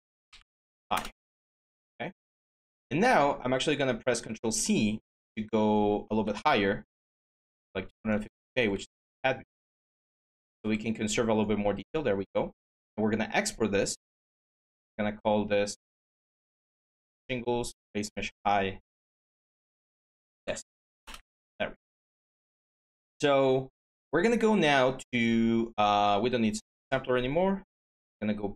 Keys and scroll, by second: 0.0 Caps_Lock, 0.0-1.0 typing, 7.2 ctrl+z, 19.5 Caps_Lock, 19.6-20.8 typing, 24.6 Tab, 26.9 Tab, 27.5 Tab.